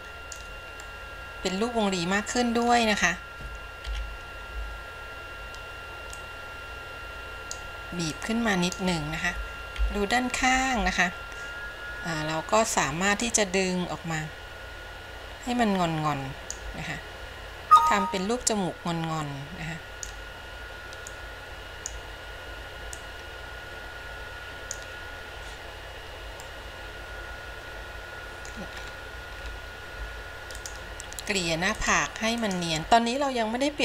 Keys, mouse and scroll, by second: 1.1-2.9 middle drag, 4.0 KP_1, 6.3-7.8 drag, 8.4 click, 9.9 KP_3, 13.4-16.8 drag, 17.9-20.4 drag, 21.2 click, 23.1-25.0 drag, 26.5-28.7 middle drag, 29.0 scroll up 2, 29.6-30.0 scroll down 3, 30.7 click, 31.9 click, 32.6 click, 32.8 middle click.